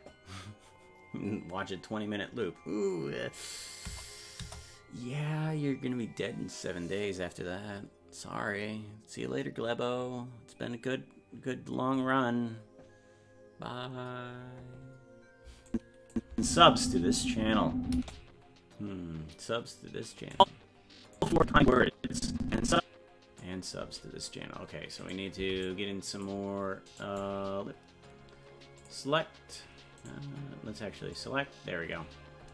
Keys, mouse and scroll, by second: 4.4 KP_0, 5.8-6.2 scroll down 1, 15.7 click, 16.3 space, 20.4 click, 21.2-23.4 drag, 24.0-24.6 scroll up 1, 24.6 scroll down 1, 25.1 right click, 25.4 c, 28.8 click, 30.1-31.1 right drag, 31.1 click.